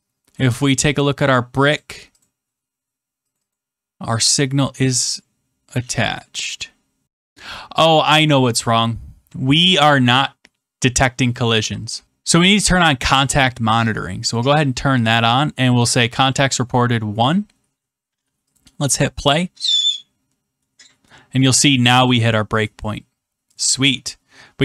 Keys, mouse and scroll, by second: 0.6 click, 2.2 click, 3.3 click, 3.5 click, 7.3 click, 12.0 click, 14.3 click, 15.8-16.9 drag, 18.5 click, 22.0-23.0 drag, 24.5-24.6 drag.